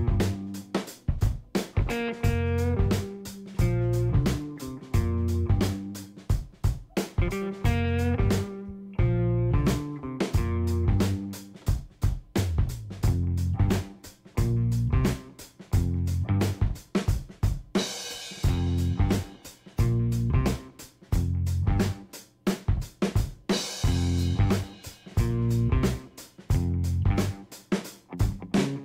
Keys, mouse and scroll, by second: 0.7 click, 1.5 click, 2.2 click, 3.2 click, 4.9-11.3 drag, 11.5 middle click, 12.2 scroll down 1, 12.5 middle click, 12.8-13.6 scroll down 3, 13.6 middle click, 20.8 click, 21.7 KP_5, 21.9 KP_0, 22.0 KP_Enter, 23.9 middle click, 25.4 click, 27.0-28.1 middle drag.